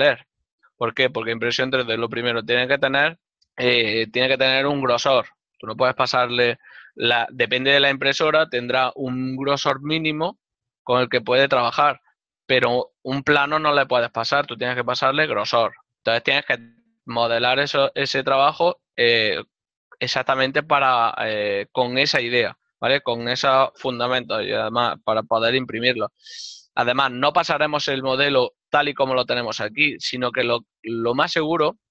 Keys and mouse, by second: 17.4 middle click, 27.5 middle click.